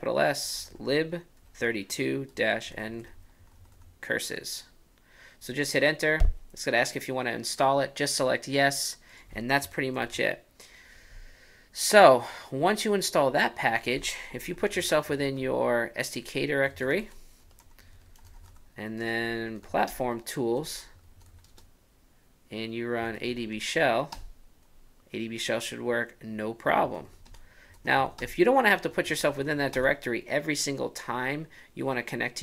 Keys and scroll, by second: 0.0-3.5 typing, 9.4 ctrl+u.